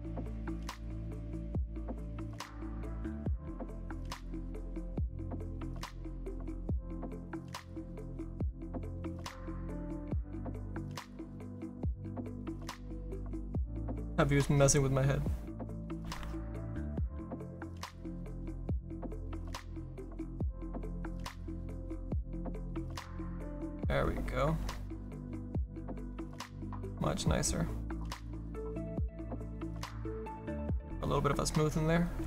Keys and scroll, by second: 15.9 ctrl+z.